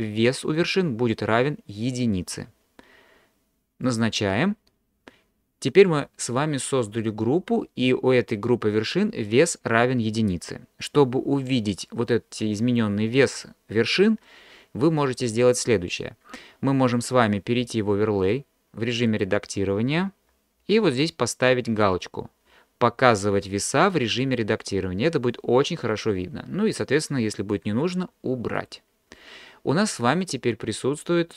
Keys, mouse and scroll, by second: 3.9 click, 19.2-29.3 drag.